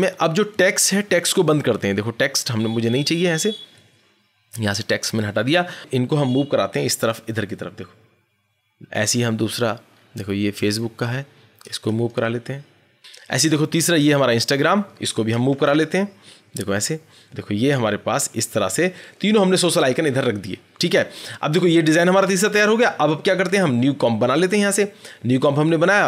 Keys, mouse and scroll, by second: 0.6-1.3 scroll, 2.8 click, 3.2-4.1 scroll, 4.7 click, 5.0 scroll, 5.7 click, 5.7 scroll, 7.0-8.7 Right, 9.1-9.6 scroll down 8, 9.6 click, 10.0 Right, 10.0 scroll, 10.3 Right, 10.4-12.8 Right, 12.9-14.2 scroll, 13.6 click, 14.2-17.2 Right, 18.2 Left, 18.3 Left, 24.4 click.